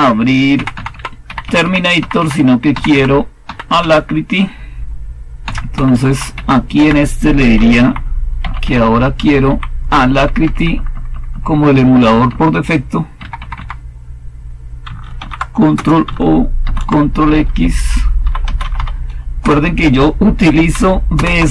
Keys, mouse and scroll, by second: 0.5 Down, 0.6 Down, 0.8 Down, 1.2 Up, 1.3 Up, 1.5 Up, 1.9 Up, 2.6 Down, 2.8 Down, 3.4-3.7 typing, 5.3-9.9 typing, 6.7 Left, 10.0 Delete, 10.3 Delete, 10.4 Delete, 10.6 Delete, 10.8 Delete, 11.0 Delete, 11.2 Delete, 11.4 Delete, 12.2 Delete, 13.1 Left, 13.3 Left, 13.5 Left, 15.1 ctrl+o, 15.4-16.1 typing, 16.5 ctrl+x, 17.9-19.1 typing, 19.3 Return, 21.0 super+Return.